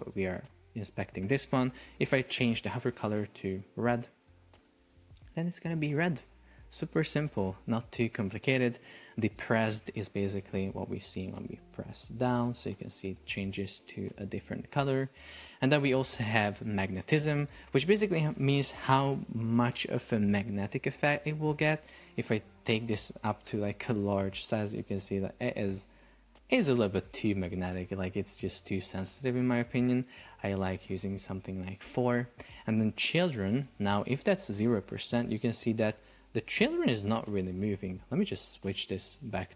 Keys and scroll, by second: 1.3 Escape, 5.3 super+p, 7.7 Escape, 10.4 super+p, 13.7 Escape, 31.3 Return, 33.9 Return, 34.4 super+p, 38.8 Escape.